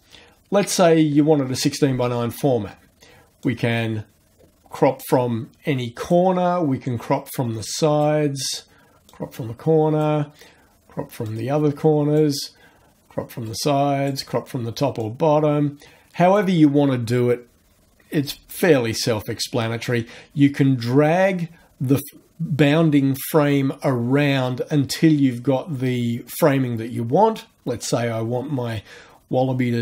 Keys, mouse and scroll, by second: 3.4-6.3 drag, 6.9-8.2 drag, 9.1 click, 11.3 click, 13.5 click, 15.0-16.6 drag, 18.5-29.8 drag.